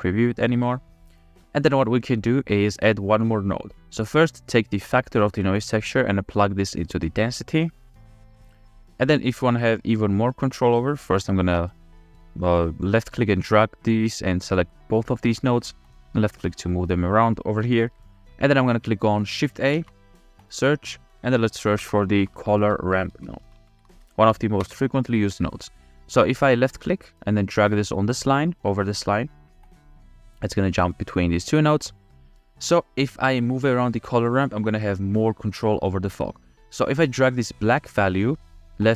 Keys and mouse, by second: 0.9 click, 2.0 middle click, 5.2 middle click, 5.5-7.4 middle drag, 8.4 middle click, 11.6-12.9 middle drag, 13.3-14.0 drag, 16.0-17.3 drag, 17.6 click, 18.5 click, 19.8 shift+a, 34.1 click, 38.8-38.9 drag.